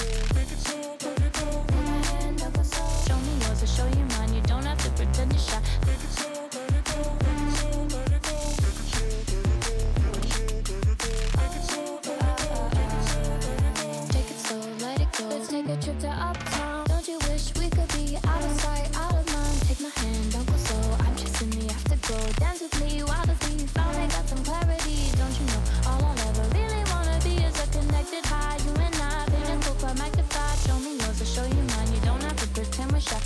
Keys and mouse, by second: 0.3 g, 5.8-6.1 shift+drag, 6.8 s, 8.2-9.8 drag, 8.2 s, 10.3 s, 11.3 s, 11.9 Tab, 14.5 a, 15.3 g, 16.4 x, 16.6 x, 17.0 o, 17.8 g, 18.9 x, 19.0 x, 19.2 Tab, 20.7 s, 22.6 ctrl+z, 23.1 ctrl+z, 23.7 Tab, 24.4 shift+click, 25.8 s, 31.8 click, 32.9-33.2 drag.